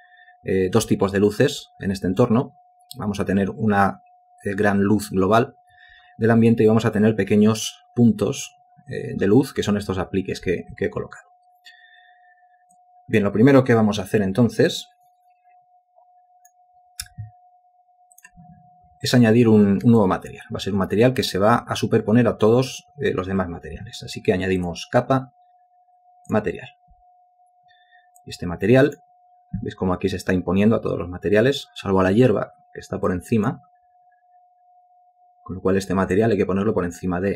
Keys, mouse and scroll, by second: 20.0 alt+click.